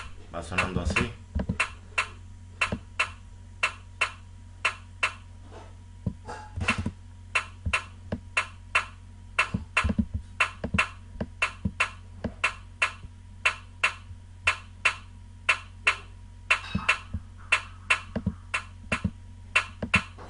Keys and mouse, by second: 17.1 click, 19.2 click.